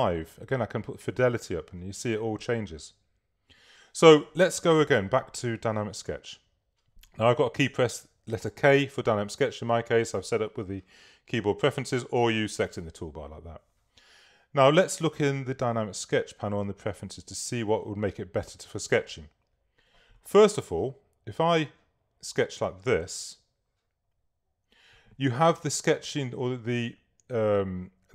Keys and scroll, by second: 8.5 k.